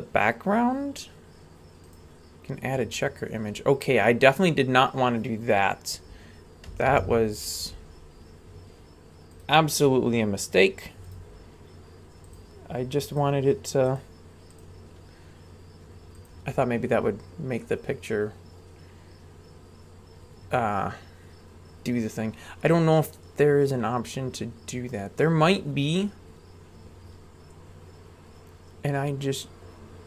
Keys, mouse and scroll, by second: 7.1 ctrl+z, 9.3-11.3 drag, 12.2-13.3 drag, 13.9-24.9 drag, 25.4-30.0 drag.